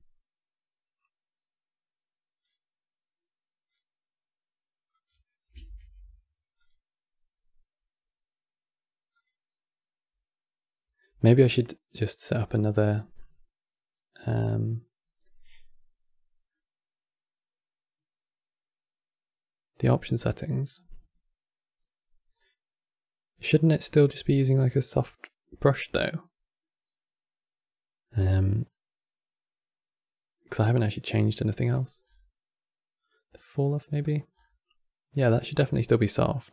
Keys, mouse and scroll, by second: 2.1-5.4 drag, 5.4 ctrl+z, 6.3-9.3 drag, 11.7-15.9 middle drag, 22.0-25.1 scroll down 2, 28.3-30.2 scroll down 2, 30.2 click, 30.7 scroll down 2, 31.4 click, 31.7-32.7 scroll down 6, 32.7-34.0 drag, 34.0-35.9 scroll down 5.